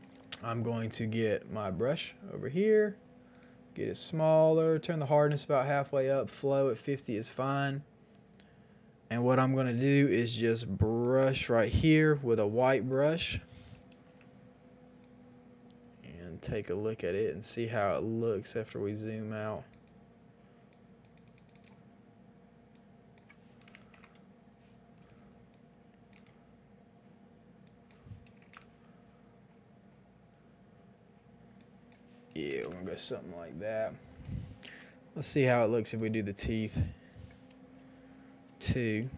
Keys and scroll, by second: 9.7 [, 9.7 [, 9.9 [, 10.0 [, 23.7 KP_1, 23.7 KP_0, 23.7 KP_0, 23.9 Return, 25.2 space, 28.4 KP_0, 28.4 Return, 32.3 KP_2, 32.4 KP_5, 32.5 Return, 33.7 space, 35.2 ], 35.4 ].